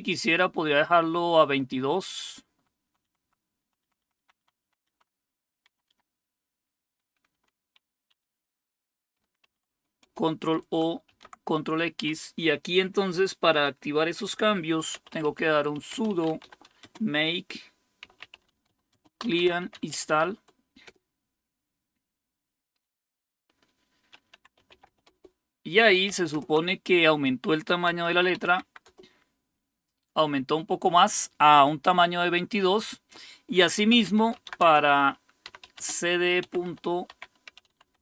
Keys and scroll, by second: 0.3-4.7 Right, 5.1 Right, 5.3 Right, 5.3 Right, 6.2 BackSpace, 6.4 Left, 7.3 Delete, 8.1 2, 9.4 ctrl+o, 10.0 Return, 11.1 ctrl+x, 14.7-20.6 typing, 20.8 Return, 24.1-25.3 typing, 26.3 super+Return, 27.6-28.8 typing, 28.9 Return, 33.7-38.0 typing.